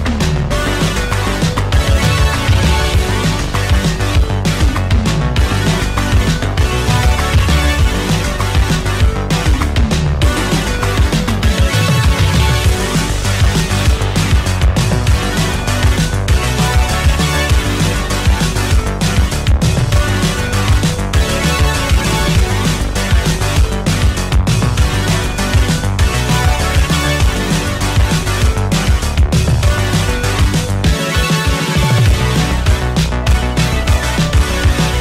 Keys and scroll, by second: 5.5 ctrl+z, 6.2 shift+..